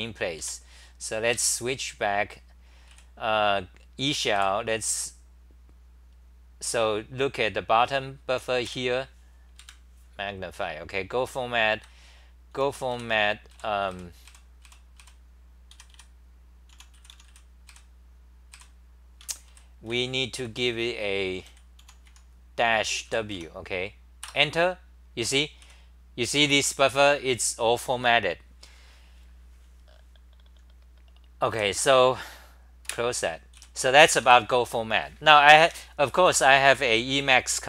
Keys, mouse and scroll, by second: 0.4 4, 1.4 ctrl+shift+Tab, 2.9 w, 4.3 Up, 5.5-7.8 scroll down 6, 7.8-8.4 s, 8.6 2, 9.6 super+=, 10.4-11.7 scroll down 4, 11.7 ctrl+g, 12.5 t, 12.9 ., 13.5 Up, 13.9 Up, 14.2 Up, 14.6 Up, 14.9 Up, 15.7 ., 15.9 ., 16.7 u, 17.7 Up, 18.6 Up, 19.2 Home, 19.2-21.8 typing, 23.3 Home, 24.2 Return, 25.6 w, 31.5 w, 32.9 super+w, 33.5 w, 34.2 3.